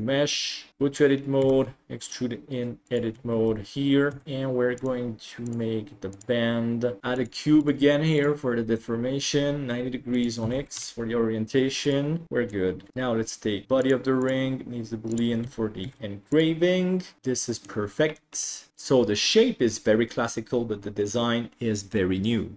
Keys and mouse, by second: 0.7 Tab, 0.7 a, 1.5 e, 4.2 Tab, 4.8 click, 7.0 shift+s, 7.2-8.6 drag, 10.1-11.2 drag, 11.9 right click, 12.7 middle click, 13.1 right click, 13.8 click, 14.2-15.7 drag, 16.9 ctrl+s, 17.2 middle click, 17.2 h.